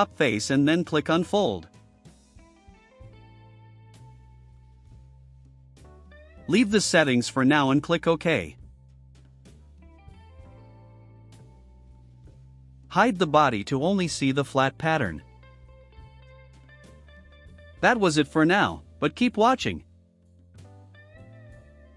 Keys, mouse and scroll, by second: 4.2 click, 7.4 click, 15.1 click, 15.6 space, 18.4 space, 19.8 click.